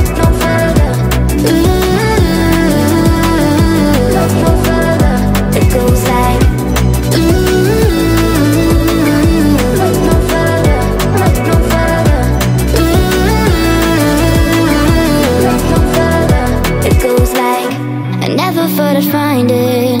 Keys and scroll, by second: 9.8 space.